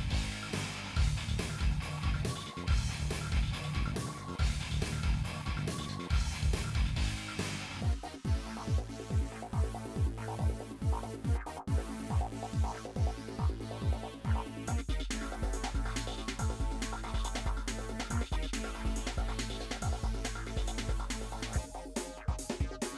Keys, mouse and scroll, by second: 0.9 KP_7, 1.1-1.6 scroll up 5, 1.3 shift+middle click, 1.6 shift+middle click, 1.8 click, 2.1 g, 3.1 click, 4.6 x, 5.1 s, 17.0 n, 17.2 n, 17.6 click, 18.3-19.7 middle drag, 19.7 scroll up 1, 19.9 shift+middle click, 21.8 middle click, 22.0-22.5 scroll down 2.